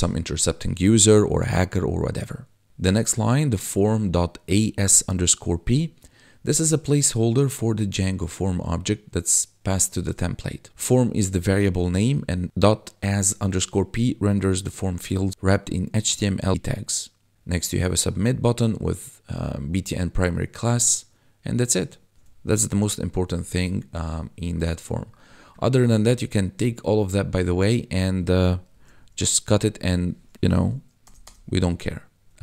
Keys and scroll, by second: 22.2 1, 28.7 ctrl+x, 31.0 BackSpace.